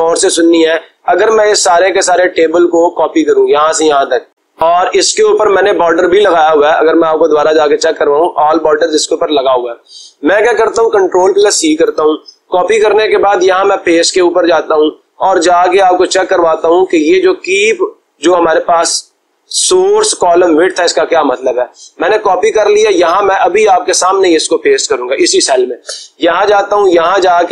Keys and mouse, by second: 3.4-5.2 drag, 6.3-7.4 drag, 8.0-9.0 drag, 11.4 ctrl+c, 14.6-15.6 drag, 22.5-23.6 drag, 23.9-24.9 drag.